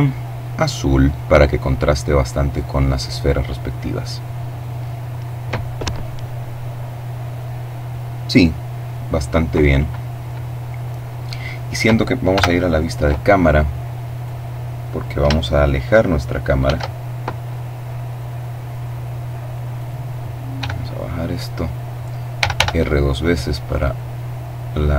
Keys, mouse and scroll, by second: 0.1 click, 11.4 KP_0, 13.2 right click, 15.6 shift+f, 16.0 shift+middle click, 16.1-16.5 shift+scroll down 2, 18.8 click, 19.6 g, 20.6 click, 21.3 r, 24.0 click.